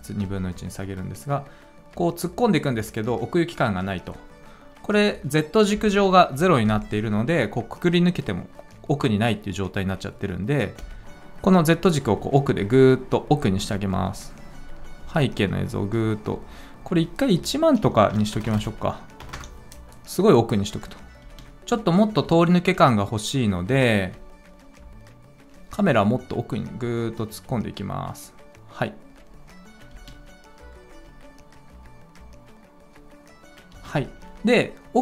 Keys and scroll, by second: 5.7 typing, 17.8-19.1 typing, 19.3 Return, 21.2 space, 29.9 space, 33.7 space.